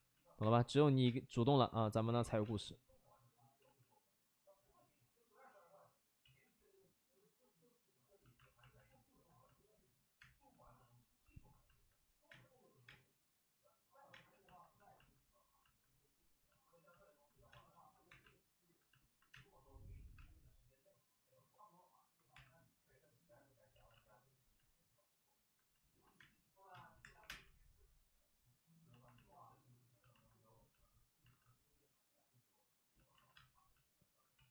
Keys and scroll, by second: 0.3 space, 1.0 space, 2.2 alt+s, 2.4 space, 3.5 ctrl+z, 6.2 ctrl+z, 8.3 alt+s, 10.1 space, 12.2 space, 12.8 space, 14.1 space, 17.5 space, 18.0 1, 19.2 space, 20.1 space, 22.3 1, 23.7 ctrl+z, 23.9 ctrl+z, 25.1 ctrl+z, 26.1-27.2 typing, 31.2 alt+s, 33.0 alt+s, 33.1 alt+s, 33.3 space, 34.3 ctrl+z.